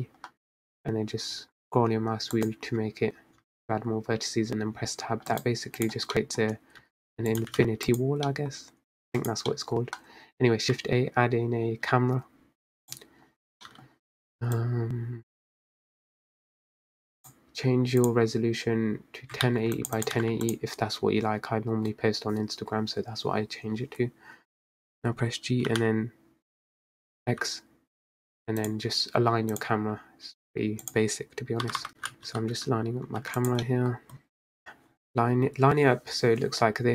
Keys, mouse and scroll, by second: 0.8 ctrl+b, 3.9 Tab, 4.6 Tab, 5.7 Tab, 6.6 right click, 7.4-8.0 middle drag, 8.0 s, 8.7 g, 9.6 middle click, 9.9 scroll up 2, 10.6 click, 10.9 middle click, 11.2 scroll down 4, 12.1 shift+a, 15.0 middle drag, 15.3-16.0 scroll up 1, 16.0-26.0 drag, 28.6 g, 31.9 g, 32.0 g, 33.7 middle drag, 34.0-34.5 scroll down 5, 34.5 middle drag, 34.6 click.